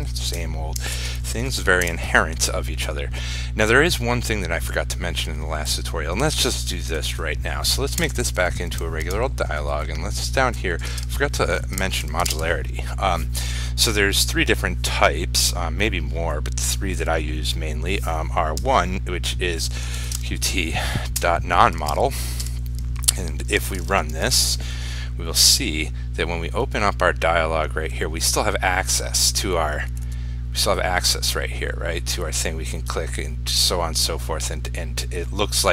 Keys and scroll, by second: 12.5 ctrl+space, 23.8 ctrl+s, 24.5 ctrl+r.